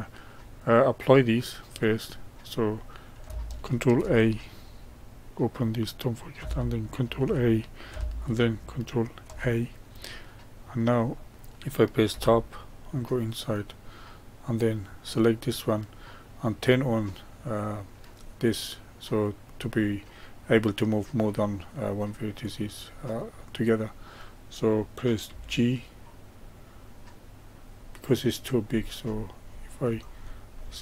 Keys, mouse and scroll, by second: 1.7-3.9 drag, 3.9 ctrl+a, 5.3-7.1 drag, 7.1 ctrl+a, 9.1 ctrl+a, 10.0-12.0 middle drag, 12.0 Tab, 12.8-15.1 middle drag, 15.1 click, 22.3 click, 23.0-25.2 middle drag, 25.2 g.